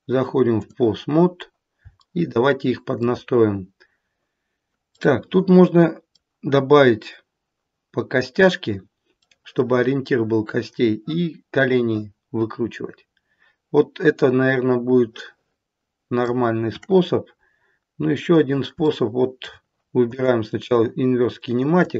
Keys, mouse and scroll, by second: 1.1-1.4 scroll up 2, 2.0 shift+middle click, 4.8 middle click, 9.2 middle click, 13.4 middle click, 17.5-18.0 scroll up 2, 17.5 KP_1, 18.3 scroll down 1, 18.8 shift+middle click, 19.3 shift+middle click, 20.0 click, 21.7 click.